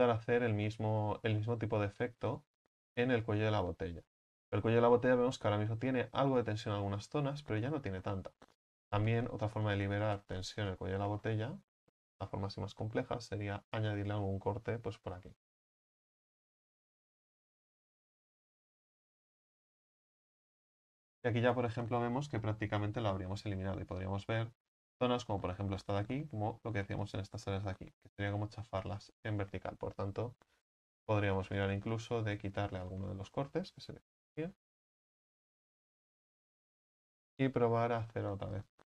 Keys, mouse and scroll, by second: 2.5-3.2 drag, 3.2-8.0 right drag, 8.0-8.7 scroll down 4, 8.7 shift+middle click, 9.5-10.0 scroll up 1, 10.0 right click, 10.5 alt+shift+right click, 10.7 alt+shift+right click, 11.2-16.5 middle drag, 16.5 u, 16.7 a, 16.9 a, 19.4 u, 23.9 right click, 24.4-29.0 shift+middle drag, 29.0 ctrl+right click, 32.8-33.2 scroll down 2, 32.8 middle click, 33.2-33.5 scroll up 3, 34.0-35.4 middle drag, 34.0-34.9 scroll up 1, 34.9-35.4 scroll up 1, 35.9 u, 36.1 scroll down 6, 36.4 a, 36.6 a, 38.8 u.